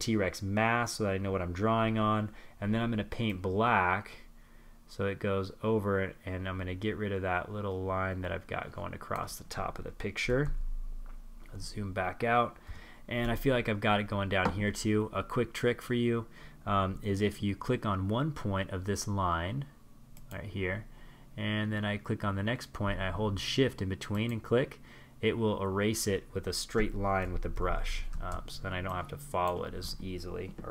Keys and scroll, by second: 8.3 super+-, 10.6 super+-, 25.4 super+=.